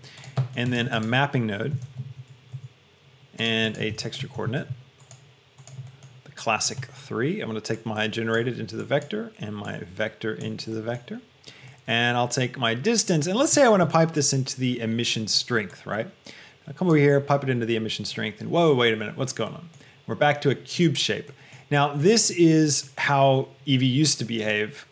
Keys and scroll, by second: 1.2 a, 1.8 m, 2.2 p, 3.0 Return, 4.0 shift+a, 4.4 e, 4.8 x.